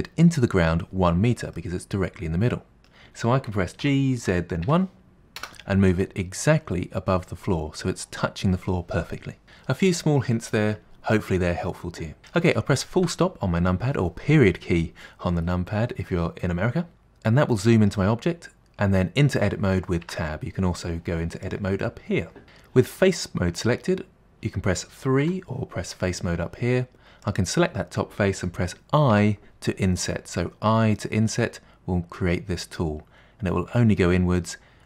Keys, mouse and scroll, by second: 1.6-3.8 middle drag, 3.8 g, 6.0-9.1 middle drag, 13.0 KP_Decimal, 15.3-16.1 scroll down 7, 16.1 middle click, 18.3-20.1 scroll up 2, 20.1 Tab, 21.4-23.6 drag, 25.2 3, 27.2 click, 29.1 i.